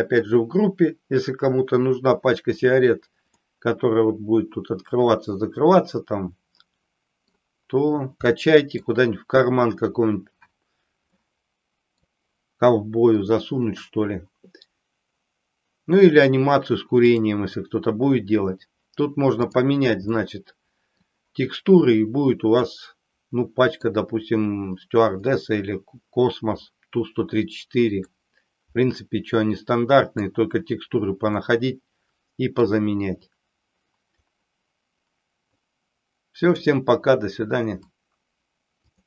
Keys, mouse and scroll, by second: 3.5-7.3 middle drag, 8.4 middle click, 11.1-11.9 middle drag, 17.1 click, 19.4 click, 20.3-21.0 middle drag, 22.6-23.9 middle drag, 28.1-30.3 middle drag, 31.2-32.5 middle drag, 36.5 click.